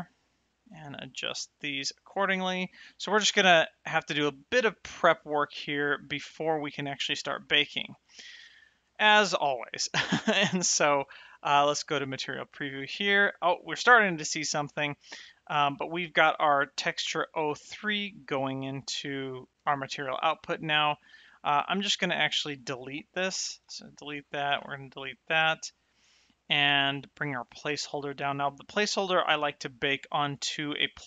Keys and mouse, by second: 1.7 click, 3.7 click, 6.4 shift+middle click, 7.3 shift+middle click, 8.1 shift+middle click, 8.6 middle click, 9.0 shift+middle click, 9.5 middle click, 12.0 click, 13.2 shift+middle click, 13.7 middle click, 14.6 shift+middle click, 16.5 middle click, 17.6 middle click, 23.6 x, 24.4 click, 24.6 x, 25.0 middle click, 26.2 middle click, 26.7 click, 27.7 middle click, 28.8 click.